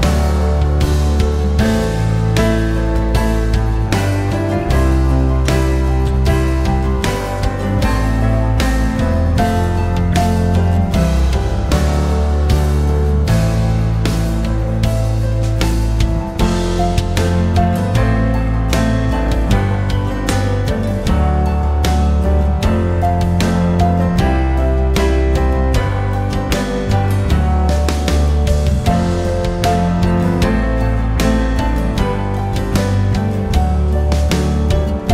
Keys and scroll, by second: 8.0-9.0 typing, 9.0 Return, 14.5 5, 15.1 0, 15.7 Return.